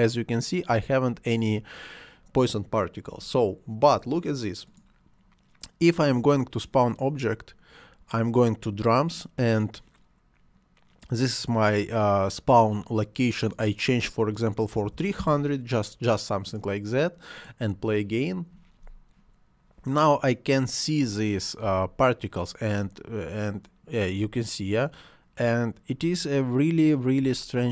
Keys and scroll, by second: 14.7 3, 15.2 Return, 21.6 space, 24.2 space, 27.2 space.